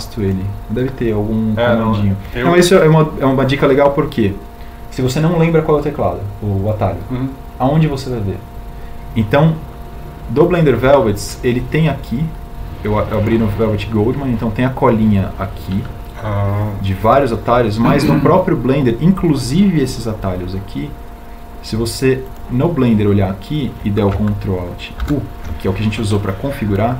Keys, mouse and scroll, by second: 25.6 ctrl+alt+u.